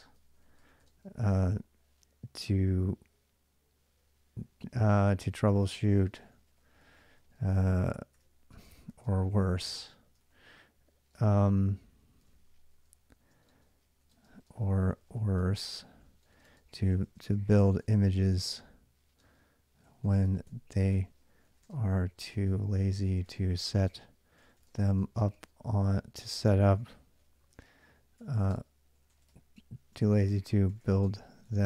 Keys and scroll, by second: 0.0-1.5 typing, 5.0-31.6 typing.